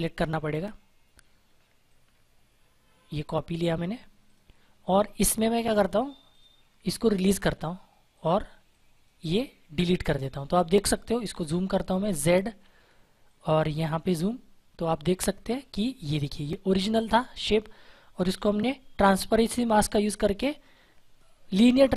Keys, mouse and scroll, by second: 1.8 click, 4.2 click, 11.6 ctrl+Num_Lock, 12.4 z, 13.2-15.2 drag, 15.2 space, 15.5 click, 15.7 space, 15.8 space, 20.8 scroll down 1.